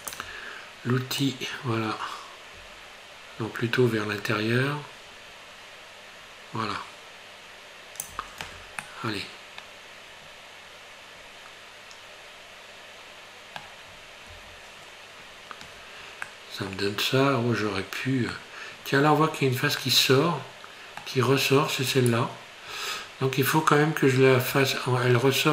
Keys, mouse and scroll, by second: 1.2 click, 8.4 Tab, 8.8 middle click, 12.9 middle click, 13.9-14.3 scroll up 2, 14.3 Tab, 15.4 scroll up 1, 16.3 middle click, 17.6 scroll up 1, 18.4 middle click, 19.4 scroll up 1, 19.8 middle click, 21.9 right click, 24.7 middle click.